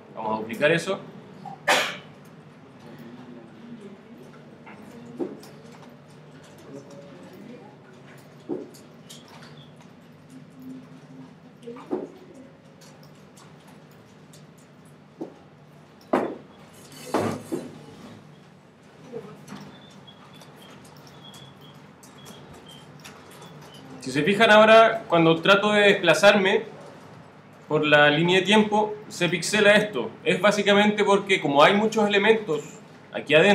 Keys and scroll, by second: 0.1 super+d, 6.3 super+d, 10.1 super+d, 13.5 super+d, 16.7 super+d.